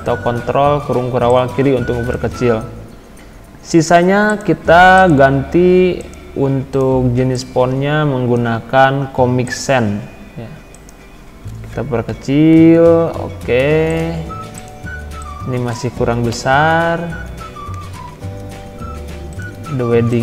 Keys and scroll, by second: 12.1 ctrl+[, 16.3 ctrl+].